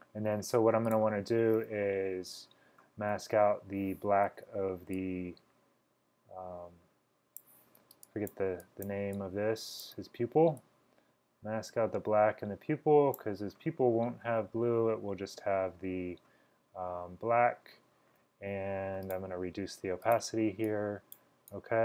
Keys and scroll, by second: 4.4 typing, 8.0-9.5 typing, 11.0 typing.